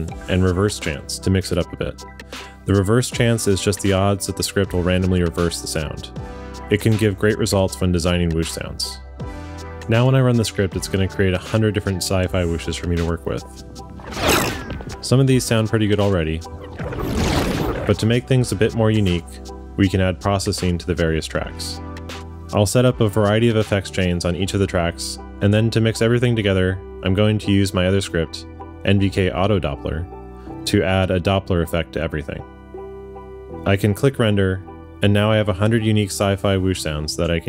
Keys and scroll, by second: 28.4 shift+super+F1.